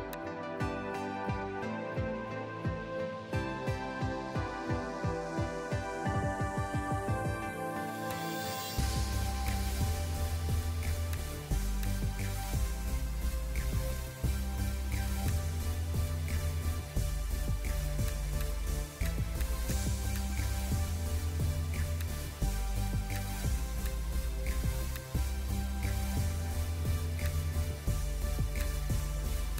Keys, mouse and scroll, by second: 3.3 scroll down 1, 5.3 scroll up 1, 7.2 [, 12.9 scroll down 1, 14.7 ], 14.9 ], 20.8-26.6 ].